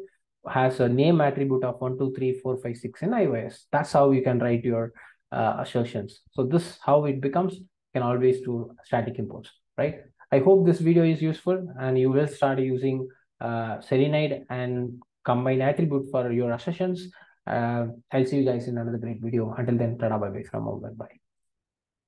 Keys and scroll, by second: 7.6 alt+Return.